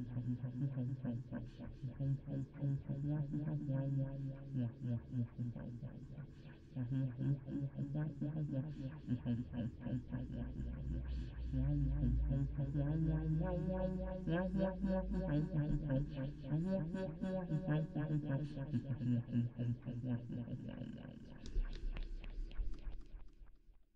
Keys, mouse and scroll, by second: 2.7-4.2 drag, 4.6-6.1 middle drag, 8.3 middle click, 10.1-10.9 d, 10.2-13.5 drag, 11.2 d, 11.9 d, 13.7-20.9 typing, 13.8 click, 22.4-23.4 d.